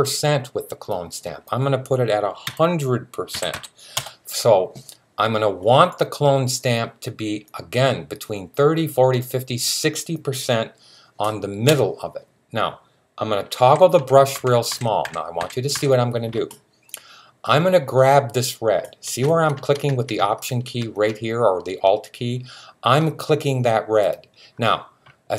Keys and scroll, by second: 2.3-3.3 typing, 13.3-15.6 typing.